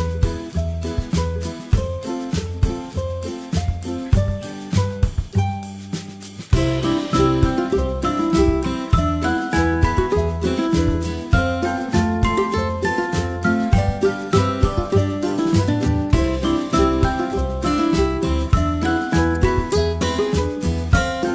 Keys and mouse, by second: 11.1 middle drag, 12.6 right click, 15.0 g, 17.1 right click, 18.3 g.